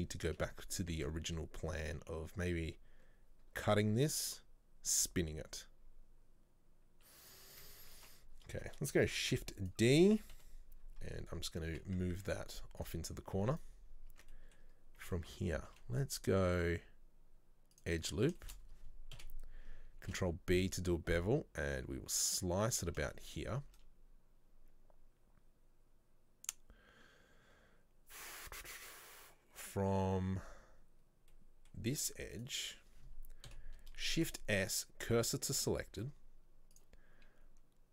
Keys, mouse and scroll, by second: 1.0 Tab, 8.0 Tab, 8.4 scroll down 1, 9.2 shift+d, 10.4 KP_7, 11.1 scroll down 1, 11.7 scroll down 5, 11.8 g, 13.2-13.6 scroll up 1, 13.6 right click, 13.9 scroll up 2, 14.2 Tab, 14.4-15.7 middle drag, 15.7 ctrl+r, 18.4 shift+middle click, 19.2 KP_7, 20.1 ctrl+b, 23.2 shift+middle click, 23.8 scroll up 1, 31.4-32.4 middle drag, 32.4 right click, 33.5 KP_7, 35.4 shift+s, 36.8 click.